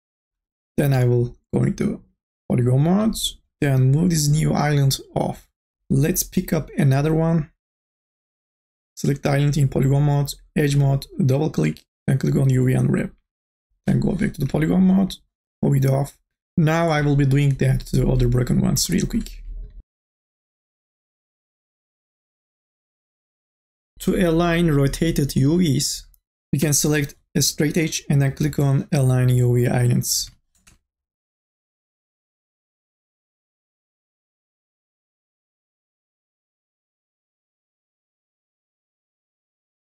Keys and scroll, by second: 3.0 3, 14.1 e, 14.8 3, 16.3 ctrl+z, 19.6-24.4 typing, 26.8 2, 30.3 3, 31.9 2, 32.6 3, 34.0 2, 34.9 3, 36.0 2, 37.3 3, 38.5 2, 39.3 3.